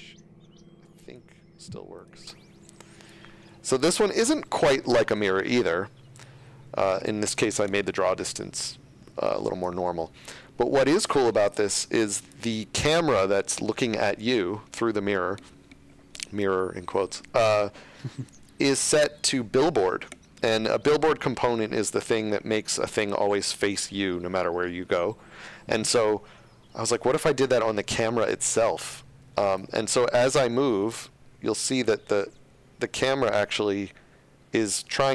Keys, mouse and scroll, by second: 3.7 shift+scroll, 4.7 shift+scroll, 5.3-5.9 shift+scroll, 6.4 shift+scroll, 29.5 click, 31.3-33.4 typing.